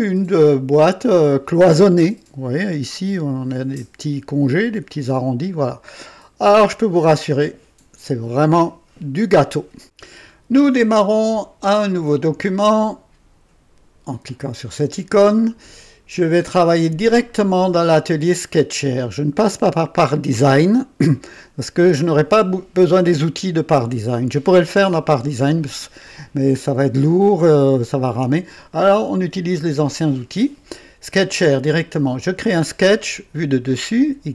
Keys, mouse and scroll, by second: 1.2 click, 5.1-6.9 drag, 9.8 click, 14.3 click, 17.0 click, 19.0 click, 32.2 click.